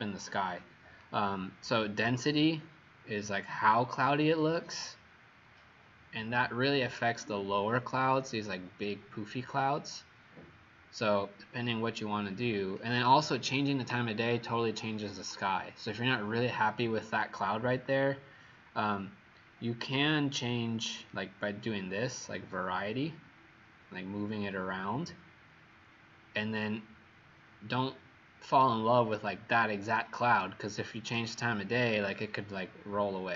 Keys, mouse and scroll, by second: 31.3 shift+right click.